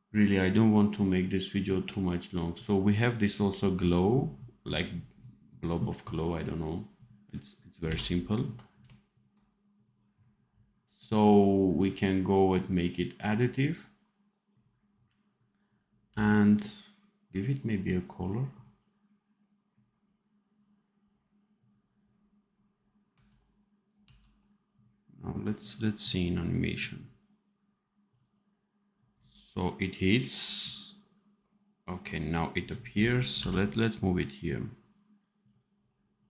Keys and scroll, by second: 7.7 n, 16.0 v, 24.0 ctrl+s, 33.3 v.